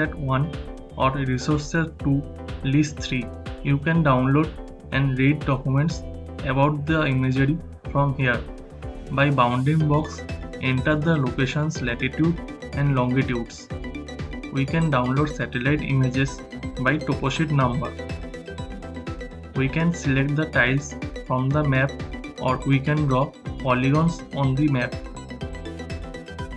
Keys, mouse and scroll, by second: 8.8 shift+f.